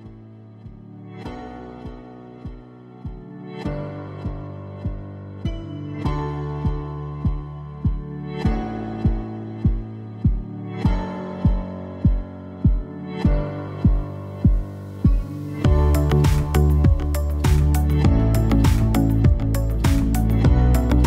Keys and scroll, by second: 2.0 alt+v, 5.8 a.